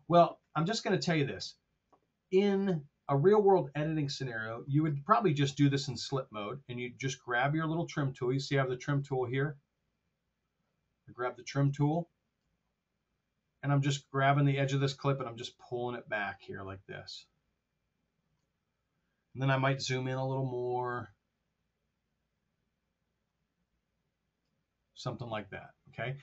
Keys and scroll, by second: 20.0 t.